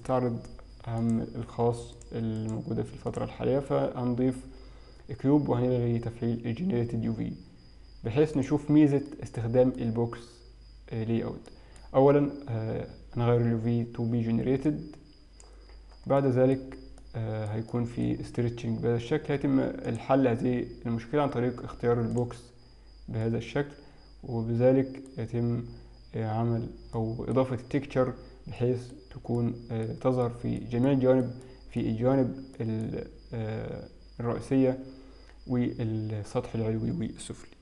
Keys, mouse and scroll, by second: 1.1 click, 2.0 click, 3.3 click, 8.4 click, 9.5 middle click, 11.5 middle click, 14.7 click, 16.6 middle click, 17.1 middle click, 17.7 middle click, 19.9 click, 23.3 middle click, 25.3-25.9 scroll up 4, 26.4 scroll down 3, 27.0 middle click, 28.7 middle click, 29.4 middle click, 30.3 middle click, 30.9 middle click, 31.9 middle click, 32.6 middle click.